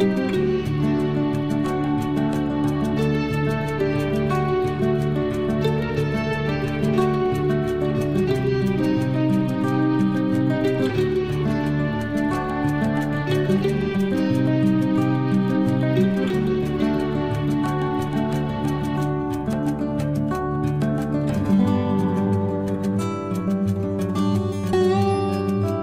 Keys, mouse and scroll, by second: 0.9 click, 3.3-5.1 typing, 6.1 click, 7.4 9, 7.7 Return, 9.8 space, 12.4 l, 13.9 click, 15.2 space, 16.3 l, 17.3 click, 17.4 click, 19.2 space, 20.3 l, 21.7-22.3 scroll up 1, 22.3 click, 23.6 space, 24.4 l, 25.7 click.